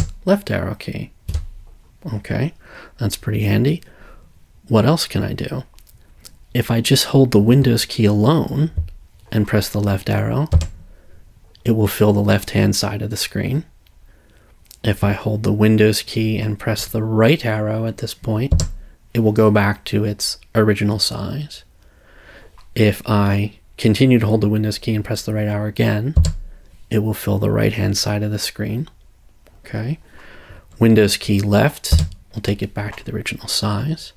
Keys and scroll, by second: 10.5 super+Left, 18.5 super+Right, 26.2 super+Right, 31.9 super+Left.